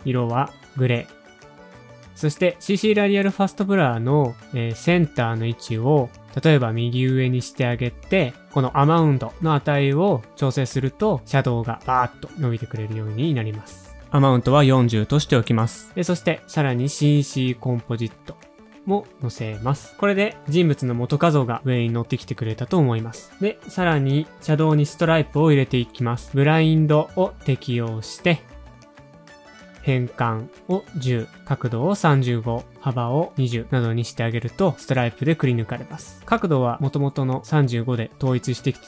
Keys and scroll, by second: 0.2 typing, 1.9-2.6 typing, 14.2-15.0 typing, 22.2 alt+/, 22.2-24.3 typing, 30.1 alt+/, 30.1-32.0 typing, 35.1 Return.